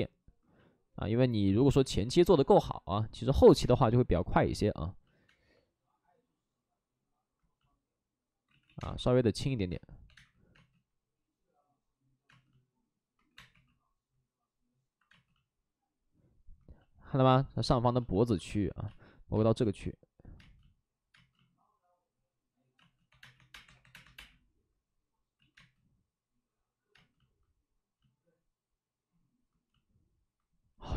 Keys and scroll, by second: 3.6 space, 5.2 space, 8.4 ctrl+z, 8.6 ctrl+z, 9.7 space, 10.0 2, 10.0 space, 13.2 2, 13.3 space, 13.4 2, 15.0 space, 18.4-21.0 typing, 23.0-23.8 typing, 25.3 ctrl+z, 25.4 space.